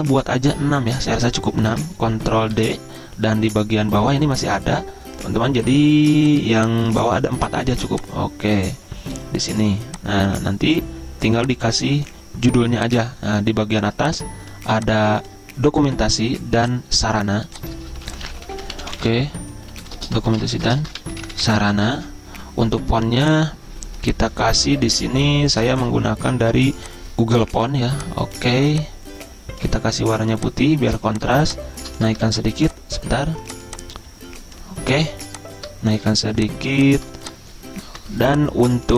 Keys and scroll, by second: 0.5 p, 2.6 ctrl+d, 18.1-19.2 typing, 20.2-21.4 typing, 22.0 Escape, 23.9-24.6 typing, 26.7 typing, 32.3 ctrl+z, 37.9-38.9 typing.